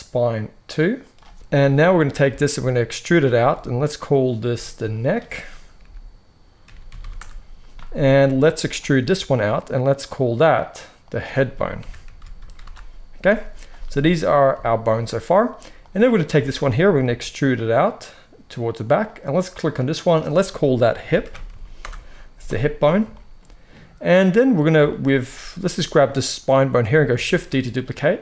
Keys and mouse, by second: 3.1-4.9 middle drag, 3.3 e, 4.9-9.9 drag, 8.9 e, 9.9 middle click, 10.0 click, 10.1-10.9 middle drag, 10.9-15.8 drag, 15.8-18.9 middle drag, 16.9 e, 18.9 click, 19.0-20.0 middle drag, 20.0-25.9 drag, 25.9-28.2 middle drag, 27.2 shift+d.